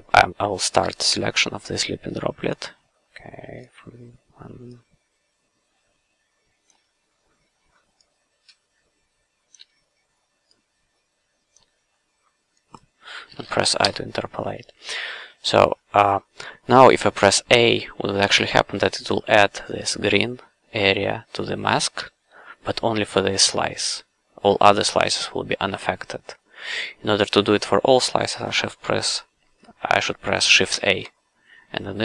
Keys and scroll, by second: 0.7 w, 6.7 f, 9.5 f, 11.5 f, 13.8 i, 21.9 a, 30.7 shift+a.